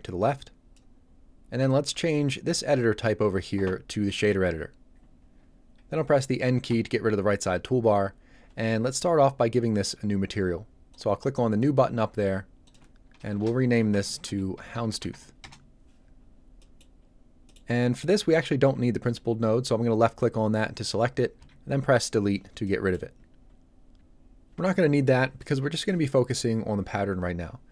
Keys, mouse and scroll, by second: 4.1 click, 6.7 n, 10.9 click, 13.3-15.1 typing, 15.4 Return, 16.6 middle click, 17.0 scroll up 1, 17.5 middle click, 17.7 scroll down 1, 18.3 click, 21.4 Delete, 22.6 middle click, 22.9 scroll down 1, 23.2 scroll up 1.